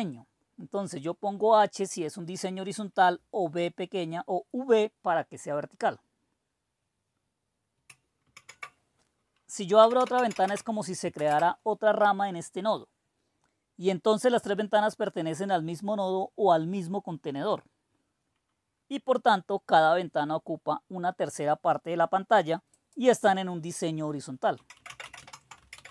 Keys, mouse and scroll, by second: 8.2 super+d, 9.4-10.8 typing, 11.2 Return, 22.8 click, 24.3-25.9 typing.